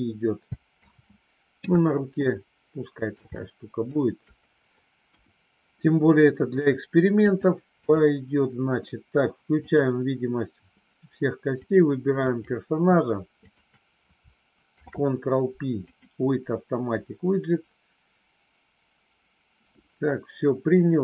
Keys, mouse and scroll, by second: 0.7 ctrl+z, 2.2-3.8 middle drag, 5.1 KP_1, 7.3 click, 9.6 click, 11.5 click, 12.2 click, 13.5 shift+click, 14.7 ctrl+p.